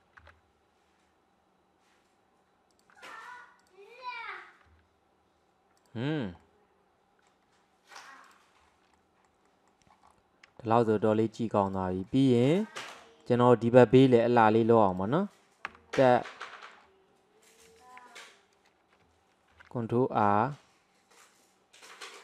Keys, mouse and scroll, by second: 0.2 g, 3.6 alt+click, 4.7 g, 6.2 scroll down 3, 6.4-8.0 middle drag, 8.0 click, 8.6-9.0 scroll down 1, 9.0-10.1 middle drag, 10.1-10.6 scroll up 3, 10.6-11.7 shift+middle drag, 11.7 click, 12.1-12.6 middle drag, 12.6-13.0 scroll up 1, 13.0-14.4 shift+middle drag, 14.4 click, 15.0 click, 15.7 Tab, 16.0 scroll up 1, 16.5-19.5 middle drag.